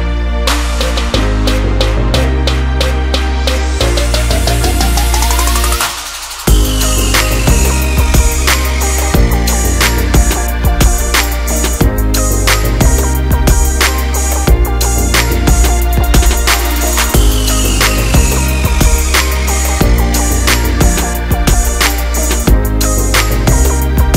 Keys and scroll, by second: 2.6 Return, 21.1 Return.